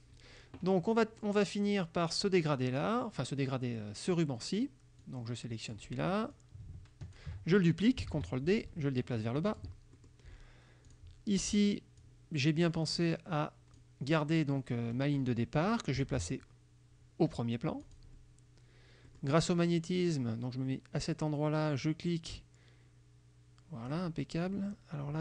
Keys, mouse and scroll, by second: 5.1 click, 6.4 click, 8.2 ctrl+d, 8.6-9.9 ctrl+drag, 10.0 ctrl+click, 11.0 click, 12.1-14.1 drag, 17.9 click, 19.2 click, 21.9-24.2 drag, 24.7 click.